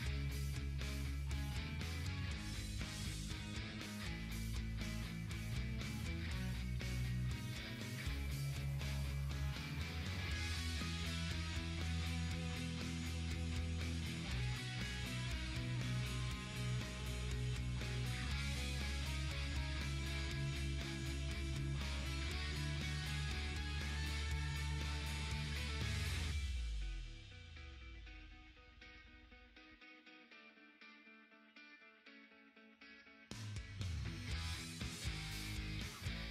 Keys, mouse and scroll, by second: 0.7 ctrl+scroll up 1, 2.4-4.9 drag, 7.1-17.5 drag, 18.5-20.2 typing, 19.7 click, 23.4-25.4 typing, 24.0 scroll down 1, 24.9-34.5 drag, 34.5 ctrl+z.